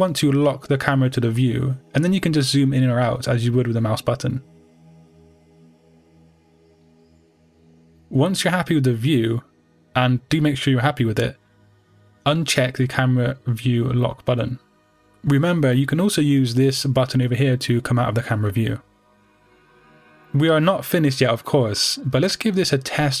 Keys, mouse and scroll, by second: 5.5 click, 6.7 scroll down 1, 7.7-8.1 scroll up 1, 8.3-8.8 scroll down 2, 8.8-9.5 scroll up 2, 9.5-9.9 scroll down 2, 9.9-10.3 scroll up 2, 10.3-14.9 middle drag, 14.9 click, 17.0 KP_0, 17.3-18.5 middle drag, 18.5 click, 19.0 click, 19.2 middle click, 19.5 click, 20.0 click, 20.5 click, 21.1-23.2 middle drag, 21.4-21.7 scroll down 2, 21.7-23.2 scroll up 2.